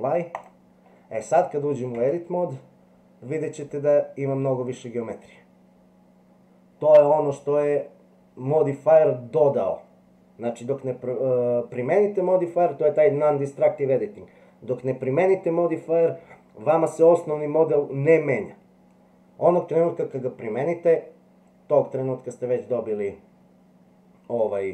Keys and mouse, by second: 2.0 Tab.